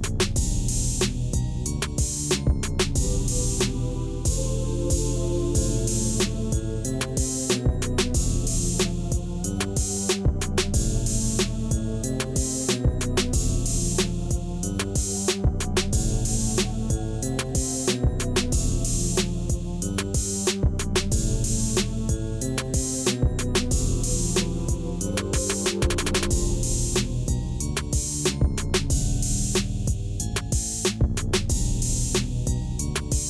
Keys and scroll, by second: 15.7 o, 15.9 r, 16.6 e, 17.0 Return, 20.6 d, 20.8 a, 21.7 Return, 24.2-25.4 typing, 26.0 Return.